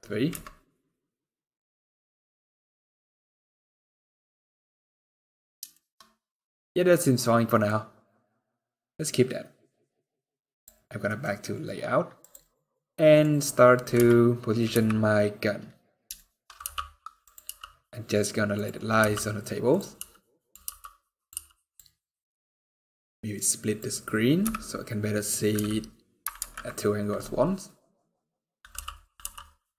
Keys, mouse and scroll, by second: 10.3 click, 10.3-11.0 scroll down 10, 10.8 middle click, 11.0-11.4 scroll up 7, 11.9 click, 12.3 scroll down 1, 12.4 middle click, 13.0 scroll up 2, 13.7 KP_3, 14.4 KP_1, 15.3 scroll up 2, 15.9 shift+middle click, 16.4 g, 17.2 r, 18.6-18.9 scroll up 3, 18.7 g, 19.7 r, 20.3 g, 21.0 r, 22.6 click, 24.2 KP_1, 25.3 KP_3, 26.1 ctrl+KP_3, 27.0-28.3 scroll down 3, 28.5 t, 28.9 t.